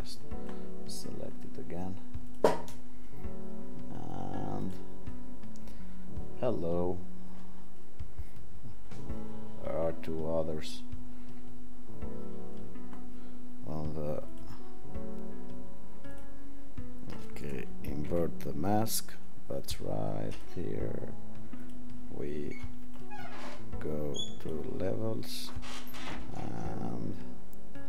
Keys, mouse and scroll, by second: 18.1 ctrl+i.